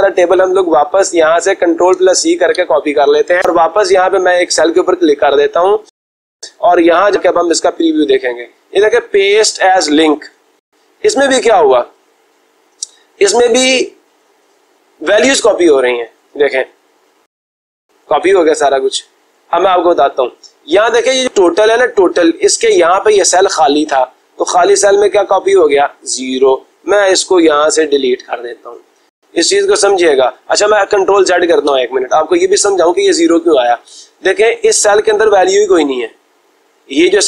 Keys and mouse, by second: 1.4 click, 2.4 ctrl+c, 4.7-5.8 drag, 6.7-7.7 drag, 17.0-18.0 drag, 19.0-20.1 drag, 22.0-23.1 drag, 23.8 click, 24.9 click, 25.7-26.8 drag, 27.6 Delete, 31.4 ctrl+z, 34.1-35.2 drag.